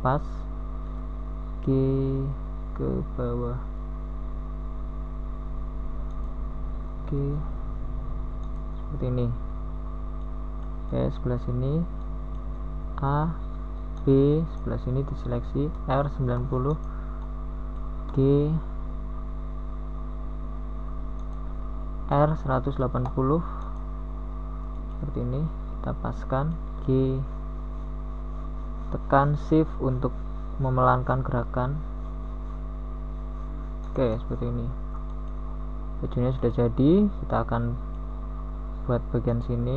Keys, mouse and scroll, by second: 0.5 u, 9.3 a, 13.7 b, 13.7 r, 15.9 g, 23.2 g, 30.3 g, 35.7 a, 38.9 b, 38.9 r.